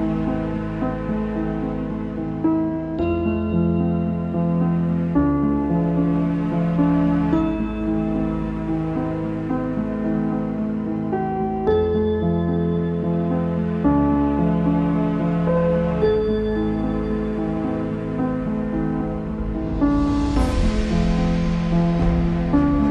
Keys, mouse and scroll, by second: 0.9 right click, 1.8 click, 2.3 click, 3.0-3.7 scroll down 2, 3.7 click, 4.3 right click, 4.6 click, 5.8 right click, 6.5 click, 7.0 right click, 7.3 click, 7.6-8.1 scroll up 3, 8.1 shift+middle click, 8.7-9.4 scroll down 4, 9.4 shift+middle click, 10.1 click, 10.9 right click, 11.2 shift+middle click, 12.0 click, 12.6 right click, 13.0-13.3 scroll down 3, 13.3 shift+middle click, 13.4 Delete, 15.5-16.4 scroll down 5, 17.5 Delete, 19.5 shift+a, 20.6-21.9 middle drag, 21.9 click, 22.2-22.9 scroll up 5.